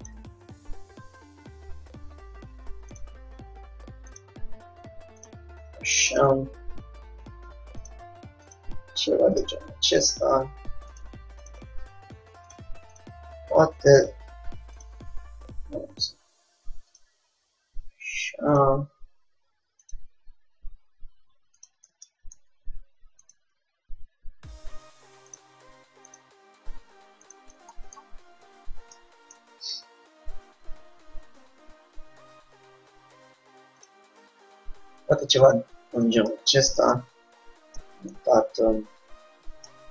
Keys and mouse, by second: 0.2-1.8 drag, 0.4 g, 4.3-6.2 drag, 5.9 g, 6.2-8.1 drag, 6.5 g, 8.6-15.8 drag, 8.8 g, 10.4 g, 11.9 g, 13.4 g, 15.8-17.2 middle drag, 17.2-18.8 drag, 17.3 g, 20.0-21.8 drag, 20.2 g, 22.2-23.8 middle drag, 23.3-24.7 drag, 23.8 g, 26.2 click, 26.4 g, 27.8 click, 28.2-30.4 middle drag, 30.0 Tab, 30.8 middle click, 32.4 r, 34.2 g, 38.9-39.9 middle drag.